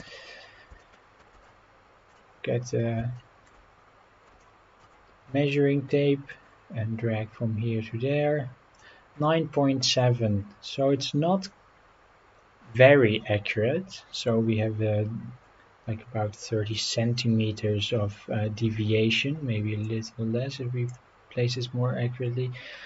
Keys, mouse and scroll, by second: 0.0 KP_7, 0.9 shift+middle drag, 1.2 shift+scroll up 1, 2.1 click, 2.6 scroll up 2, 3.2-3.5 shift+middle drag, 4.0 scroll down 1, 4.4-4.8 shift+middle drag, 6.3-8.8 drag, 13.2-13.9 scroll down 2, 14.1-14.6 scroll up 2, 18.6-19.2 scroll up 3, 19.8 click, 21.5 scroll down 4, 22.1-22.8 scroll up 8.